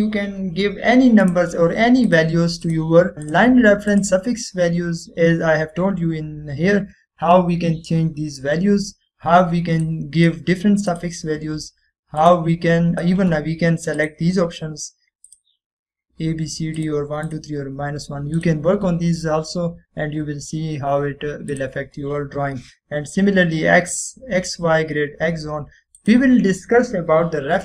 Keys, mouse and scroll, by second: 2.4 right click, 3.1 click, 11.0-11.6 click, 19.8 typing, 22.6 click, 24.9 typing, 25.7 click.